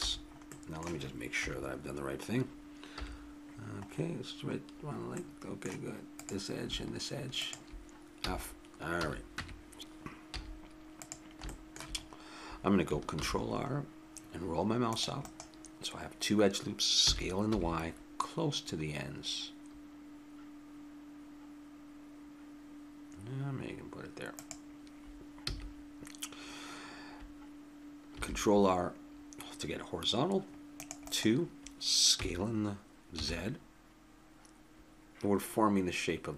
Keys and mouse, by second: 0.0 a, 1.4 KP_3, 2.9 KP_1, 5.5-7.6 right drag, 8.2 f, 8.9 a, 9.4 Tab, 9.8 KP_3, 10.3 z, 13.1 ctrl+r, 17.0 s, 25.5 a, 28.1 ctrl+r, 32.1 s.